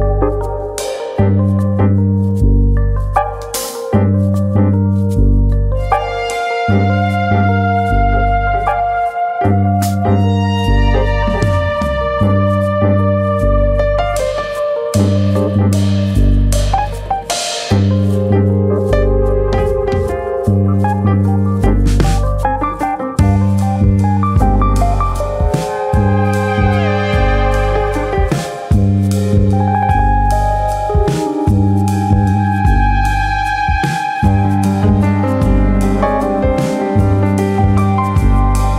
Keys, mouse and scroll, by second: 0.2 click, 1.8 alt+click, 2.9 g, 5.2 click, 5.5 middle click, 6.5 alt+click, 6.7-7.6 scroll down 1, 7.6 scroll down 1, 7.6 g, 9.2 click, 9.7 alt+click, 10.6 g, 11.7 click, 12.5 ctrl+r, 13.6 right click, 14.0 middle click, 14.2-14.6 scroll up 2, 14.6 middle click, 15.2 ctrl+z, 16.2 middle click, 16.8 click, 17.8 middle click, 18.8 click, 20.2 g, 21.2 click, 21.6 click, 21.6 g, 22.6 click, 22.9 middle click, 24.4 ctrl+r, 25.5 right click, 25.8 middle click, 27.3 middle click, 29.1 middle click, 30.0 click, 30.4 middle click, 31.1 ctrl+click, 31.9 ctrl+z, 32.3 ctrl+click, 32.8 ctrl+click, 33.1 middle click, 33.7 click, 36.1 middle click, 36.6 middle click, 36.9 Tab, 37.4 scroll up 2, 37.6 shift+middle click, 37.7 shift+middle click, 37.9 middle click, 38.1 Tab, 38.2-38.6 scroll up 2, 38.6 middle click.